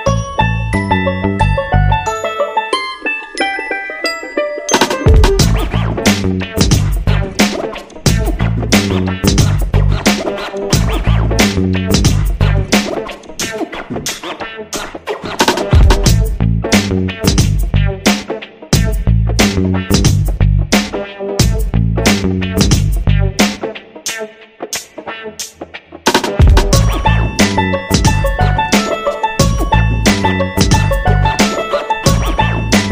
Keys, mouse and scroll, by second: 8.5-9.3 typing, 13.6-14.5 typing, 23.7-25.0 typing, 26.5-28.8 typing, 31.9-32.5 typing.